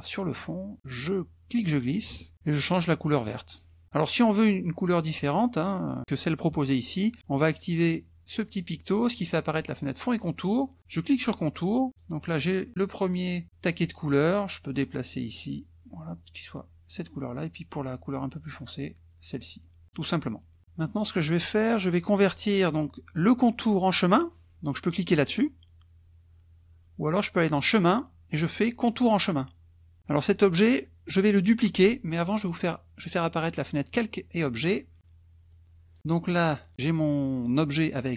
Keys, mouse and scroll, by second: 1.5-2.3 drag, 3.4 click, 8.4 click, 10.8 click, 11.9 click, 14.9-17.1 drag, 17.4-20.1 drag, 21.9 click, 27.5 click, 29.2 click, 32.4 click, 33.8 click, 35.6 click, 36.7 click.